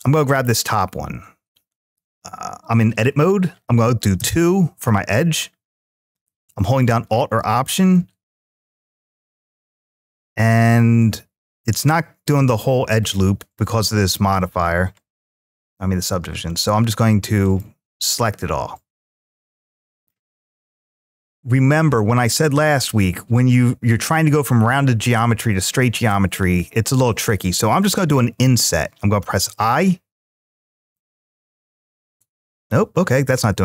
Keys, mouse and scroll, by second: 0.3-0.9 scroll up 1, 4.0 2, 6.3 alt+click, 7.7 alt+middle click, 9.6 middle click, 12.2 alt+shift+click, 12.9-13.9 middle drag, 14.7 alt+shift+click, 15.4 middle click, 17.2 alt+shift+click, 17.8-19.9 middle drag, 29.0 i, 32.4 right click.